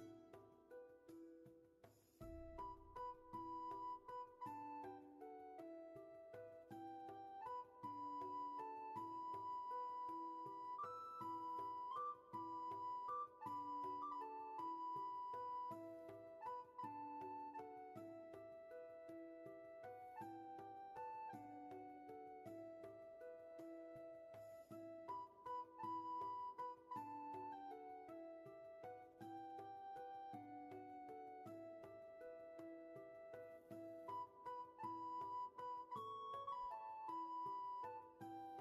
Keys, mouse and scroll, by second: 5.9 ctrl+z, 11.1 ctrl+z, 23.1 space, 23.7 shift+space, 28.6 ctrl+z, 36.4 ctrl+z.